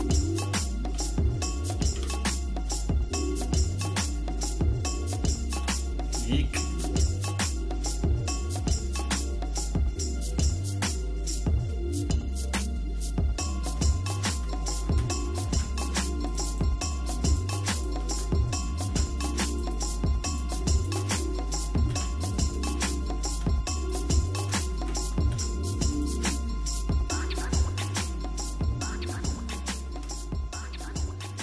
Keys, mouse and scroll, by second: 0.9 g, 4.4-5.5 shift+middle drag, 5.7 middle click, 6.3 shift+middle click, 7.1 click, 7.7-10.3 shift+middle drag, 11.0 scroll up 1, 11.0 scroll down 1, 11.7-13.7 shift+middle drag, 14.2 shift+click, 15.4 alt+m, 16.5 click, 17.2 click, 17.7 shift+click, 18.8 alt+m, 19.7 click, 20.3 click, 20.7 shift+click, 21.8 alt+m, 22.5 click, 22.9 shift+middle click, 23.9 click, 24.2 shift+click, 25.2 alt+m, 25.9 click, 26.4-27.0 scroll down 2, 27.0 shift+middle click, 28.1 middle click, 28.6-30.0 shift+middle drag, 30.2 scroll down 1, 30.2 scroll up 1, 30.3 scroll down 1, 30.6-31.4 shift+middle drag.